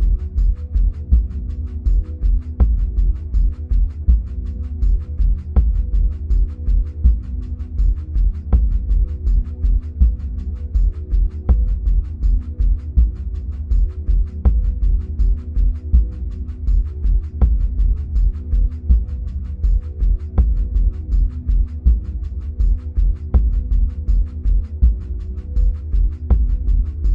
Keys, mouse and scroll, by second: 5.1-7.4 middle drag, 7.4-15.3 drag, 15.3-19.3 middle drag, 19.6-21.6 middle drag, 21.6-26.6 drag.